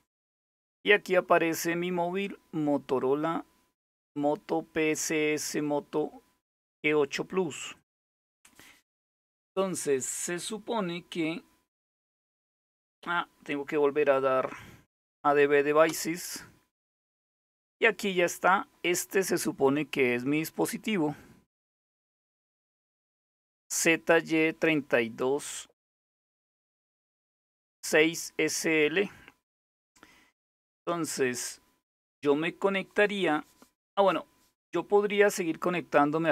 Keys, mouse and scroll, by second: 1.9-3.6 drag, 7.5 click, 13.8 Up, 14.1 Up, 15.5 Return, 20.2-22.5 drag, 29.3 click.